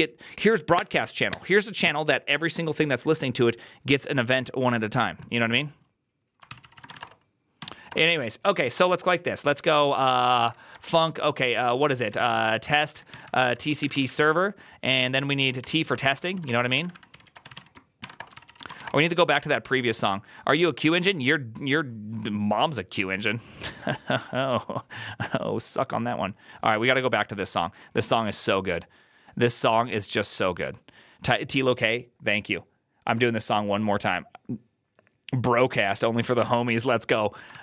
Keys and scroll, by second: 6.5 ctrl+c, 6.5-7.5 typing, 7.7 Return, 9.8-19.2 typing, 37.5-37.6 typing.